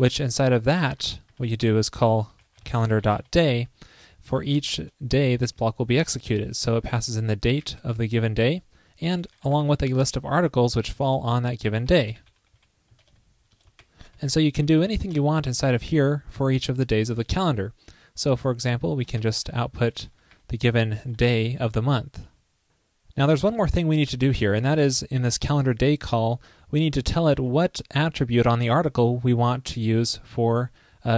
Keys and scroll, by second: 0.9 ctrl+shift+., 1.2 ctrl+shift+Right, 11.1 super+Return, 11.9 ctrl+shift+., 13.0 super+Return, 13.8 ctrl+shift+., 14.9 super+Right, 19.1 ctrl+shift+>, 22.2 super+,.